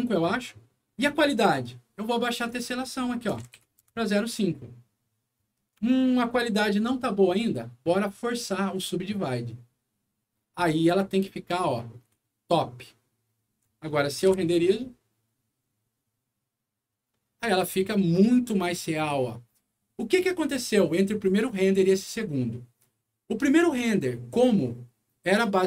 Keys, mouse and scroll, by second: 2.2 click, 2.4 click, 3.2 KP_0, 3.6 5, 3.8 Return, 5.8 alt+middle click, 9.0 alt+click, 11.8 scroll up 1, 12.1-13.5 alt+middle drag, 13.8 alt+middle click, 14.2 F9, 17.9 scroll up 1, 18.8 scroll down 2.